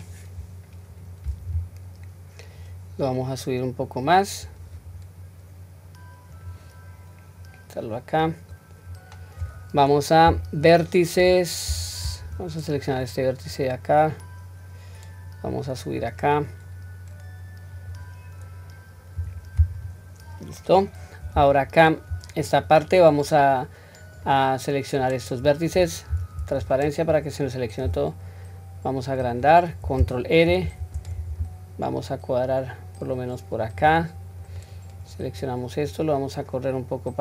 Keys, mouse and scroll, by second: 0.4 scroll down 1, 2.6 click, 2.9 click, 6.4 click, 7.5-8.1 scroll up 1, 9.4-10.3 scroll up 2, 10.3 q, 11.7 1, 12.4-12.9 drag, 13.5-16.1 drag, 17.8 click, 19.2 q, 19.8-20.7 scroll down 1, 20.7-21.4 scroll down 1, 21.5 shift+middle click, 24.1-25.4 drag, 26.1 q, 26.6 click, 27.9 s, 30.5 ctrl+r, 34.4 click, 35.9-37.2 drag.